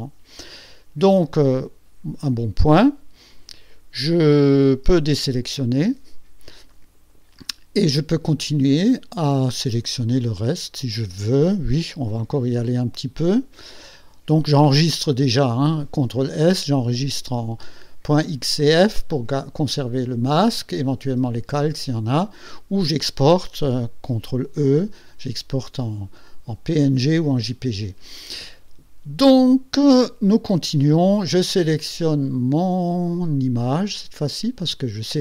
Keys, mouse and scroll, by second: 5.8 ctrl+shift+a, 7.0-7.4 ctrl+scroll up 2, 8.1-8.5 ctrl+scroll down 1, 8.8 ctrl+click, 10.1-10.5 ctrl+scroll up 4, 34.2 click.